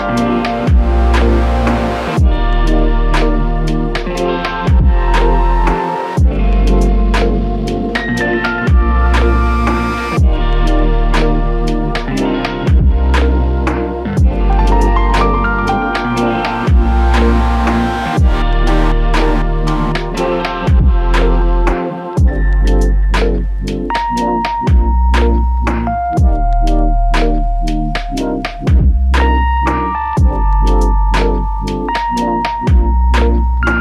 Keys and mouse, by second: 1.1 double click, 3.9 shift+click, 5.0 double click, 5.5 alt+click, 6.5 double click, 8.1 shift+click, 10.6 ctrl+alt+click, 19.1 alt+click, 20.2 alt+click, 20.4 ctrl+click, 22.4 ctrl+click, 22.5 alt+click, 24.2 alt+click, 29.0 f, 29.8 alt+click, 32.8 typing.